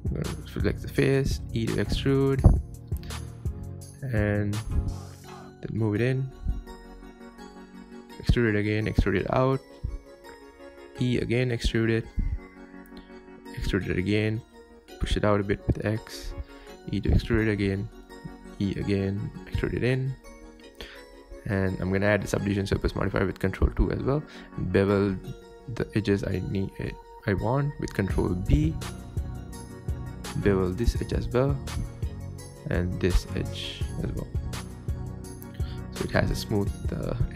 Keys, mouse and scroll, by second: 0.5 3, 0.7 click, 1.0 shift+middle click, 1.3 alt+z, 1.5 scroll up 1, 1.6 shift+middle click, 2.2 e, 2.8 s, 4.5-8.9 typing, 10.9 e, 11.6 s, 13.7 e, 14.4 click, 14.5 g, 16.5 e, 16.8 s, 18.8 e, 19.1 g, 20.4 Tab, 20.9 ctrl+2, 22.3 Tab, 23.0 ctrl+r, 24.7-25.3 scroll up 1, 25.3 alt+Left, 25.9 ctrl+b, 28.0 ctrl+b, 30.9 alt+click, 31.3 ctrl+b, 33.2 alt+click, 33.9 ctrl+b, 36.2 Tab, 36.4 Tab, 36.9 alt+click.